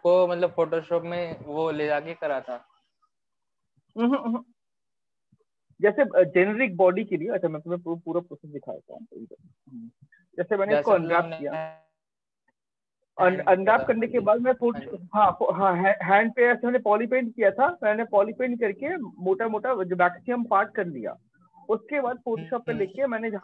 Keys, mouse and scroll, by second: 0.3 click.